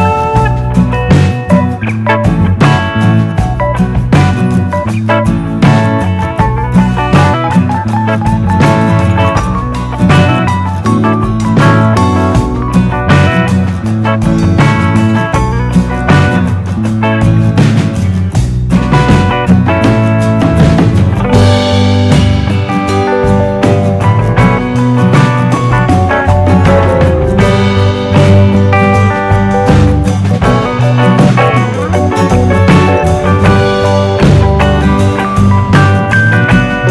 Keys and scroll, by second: 0.1 super+d, 12.8 super+d, 13.8 d, 28.0 BackSpace, 29.4 BackSpace, 31.6 BackSpace.